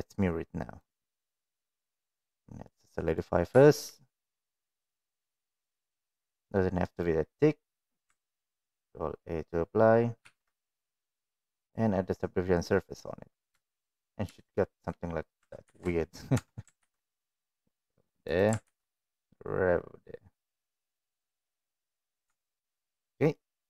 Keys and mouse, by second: 0.8-2.4 drag, 2.7-3.2 middle drag, 3.6 shift+middle drag, 3.7 shift+click, 5.5 click, 5.6 click, 6.2 drag, 6.9 middle click, 10.2 ctrl+a, 10.8 middle click, 11.6-12.9 drag, 13.6 shift+middle drag, 14.5 shift+middle click, 15.6 ctrl+r, 16.3 Tab, 16.7 ctrl+r, 18.6 ctrl+r, 22.2 Tab, 22.4 click, 22.9 middle click.